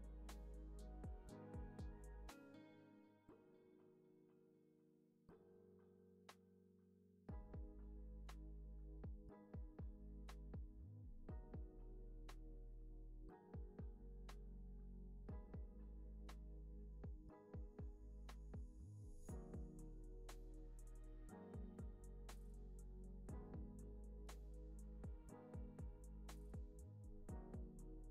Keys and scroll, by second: 13.6 space, 16.3 space, 27.1 0, 27.2 Return.